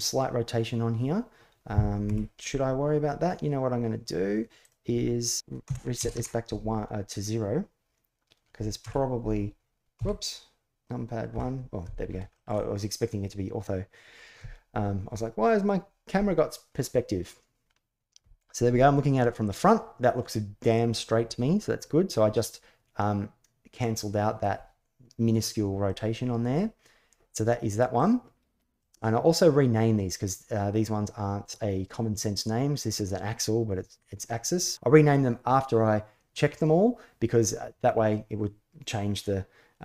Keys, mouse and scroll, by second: 1.8 KP_1, 4.5-6.3 drag, 8.6 KP_1, 9.7 KP_1, 11.1 KP_5, 12.1 shift+middle click, 25.6-26.4 middle drag, 28.3 middle click.